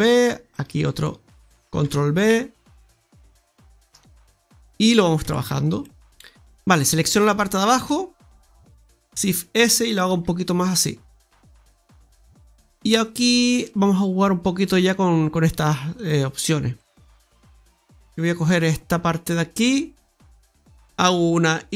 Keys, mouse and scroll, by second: 0.4 right click, 0.8 alt+shift+right click, 1.7 ctrl+b, 4.3-5.1 scroll down 1, 5.1 Tab, 5.4-5.7 scroll down 3, 5.7 middle click, 6.0 ctrl+z, 6.0 middle click, 6.1 right click, 6.7 right click, 7.1 alt+shift+right click, 7.3 alt+shift+right click, 7.8 middle click, 8.7 scroll up 1, 9.0 shift+s, 10.2 s, 12.7 middle click, 12.7 scroll down 1, 13.1-13.5 scroll up 1, 13.5 middle click, 15.9 click, 16.7 right click, 20.3 ctrl+z, 20.3 middle click.